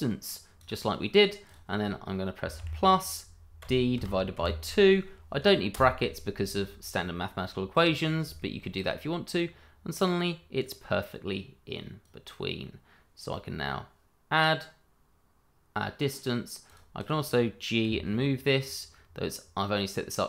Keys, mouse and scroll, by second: 2.5 shift+=, 3.6 d, 3.9 /, 4.3 2, 5.7 Return, 7.8 scroll down 1, 8.3 shift+middle click, 9.0 scroll down 1, 10.5 click, 16.9 double click, 17.8 g.